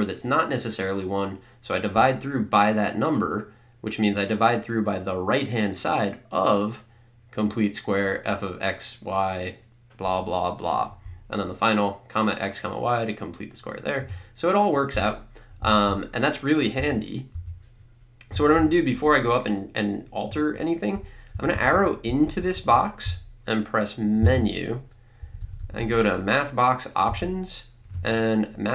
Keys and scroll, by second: 16.8 BackSpace, 21.0 Up, 21.3 Down, 22.1 Up, 24.3 Menu, 25.2 Down, 27.1 Right.